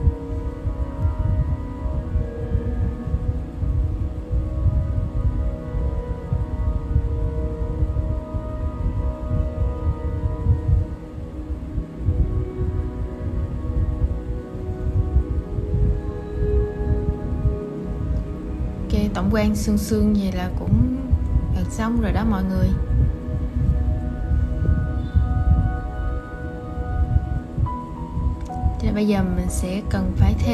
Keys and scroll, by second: 22.3 super+c, 23.8 super+2, 26.4 super+v.